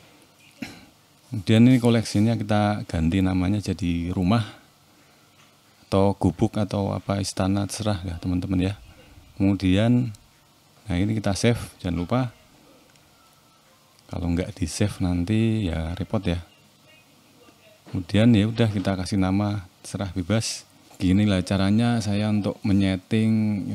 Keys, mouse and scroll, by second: 0.3 click, 0.9 click, 1.4 click, 5.7 click, 6.3 click, 6.6 middle click, 7.2-7.7 scroll up 1, 7.7 shift+middle click, 8.1 middle click, 9.3 shift+middle click, 10.1 ctrl+s.